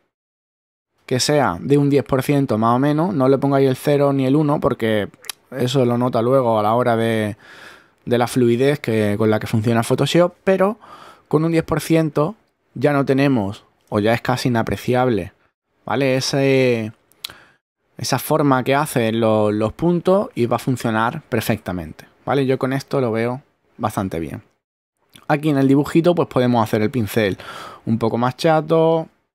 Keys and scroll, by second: 14.4 super++, 15.6 super+-, 17.2 super+z, 29.2-29.3 typing.